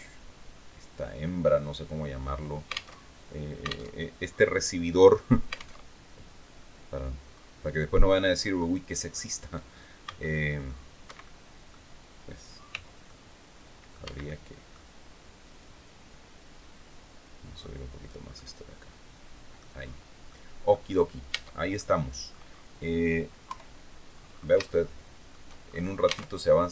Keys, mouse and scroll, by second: 2.4 alt+Tab, 3.4 alt+Tab, 5.3 alt+Tab, 6.4-6.7 scroll down 2, 6.8-7.2 scroll up 2, 7.6 click, 9.5 c, 9.9 click, 10.5 Escape, 10.7 click, 12.2 c, 12.5 click, 12.8 middle click, 13.5 Escape, 13.7 middle click, 15.1-17.7 drag, 17.8-19.3 middle drag, 19.7 middle click, 20.8 Tab, 21.2 middle click, 21.4 click, 22.9 KP_3, 23.6-24.0 scroll up 2, 24.2 shift+click, 25.1-25.4 shift+scroll up 2.